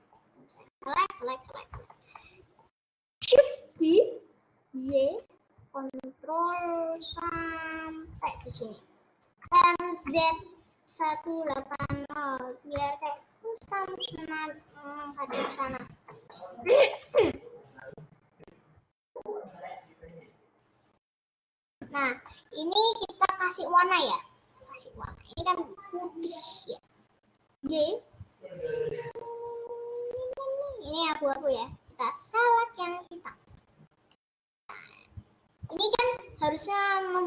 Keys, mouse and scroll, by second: 0.2-1.1 scroll up 9, 1.4 scroll down 1, 1.6-3.2 middle drag, 3.2-3.6 scroll down 3, 3.8 shift+d, 8.7-9.1 scroll down 2, 9.4 r, 15.6 middle click, 16.4 scroll down 3, 16.6-25.3 shift+middle drag, 25.3 scroll up 1, 27.7 g, 35.0-36.0 middle drag, 36.0 scroll down 2.